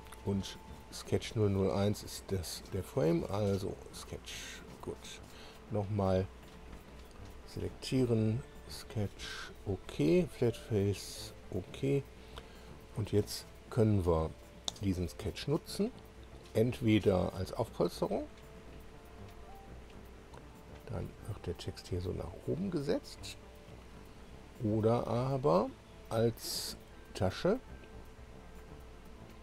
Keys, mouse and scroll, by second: 1.1 click, 1.6-2.0 scroll down 1, 6.4 click, 7.6 click, 8.4 click, 9.1 click, 10.9 click, 13.1 scroll down 1, 14.8 click, 17.3 click, 19.8-23.8 drag, 25.1 click, 26.4 click.